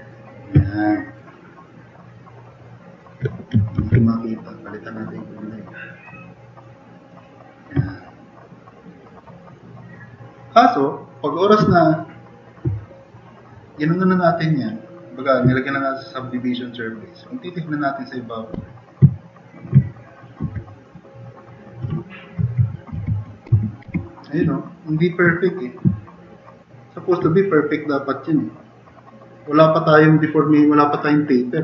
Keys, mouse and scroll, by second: 0.6-1.2 drag, 2.1-2.8 drag, 3.8 ctrl+d, 7.9-8.4 drag, 9.2-11.1 drag, 13.6-14.7 drag, 18.5 s, 19.2 click, 20.4 4, 22.2-24.3 typing, 26.9-27.7 typing.